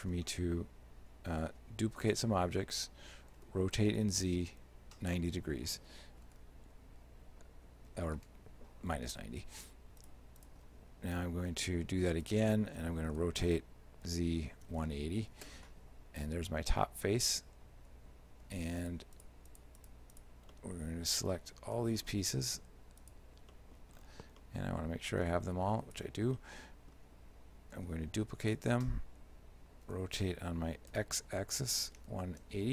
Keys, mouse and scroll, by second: 1.5 shift+d, 3.4 r, 10.1 shift+right click, 10.4 shift+right click, 11.6 shift+d, 13.2 r, 17.9 z, 18.4 z, 18.9 shift+right click, 19.2 shift+right click, 19.5 shift+right click, 20.2 shift+right click, 20.6 shift+middle click, 22.0-23.1 scroll up 7, 23.1 shift+right click, 23.6 middle click, 24.0-24.4 scroll down 7, 24.4 middle click, 25.3 g, 26.4 shift+middle click, 27.8 shift+d, 29.9 r.